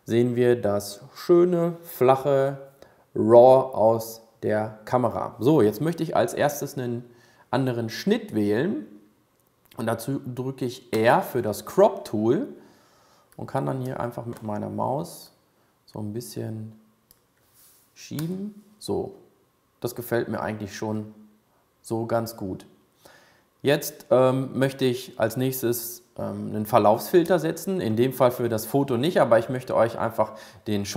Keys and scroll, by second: 11.1 r.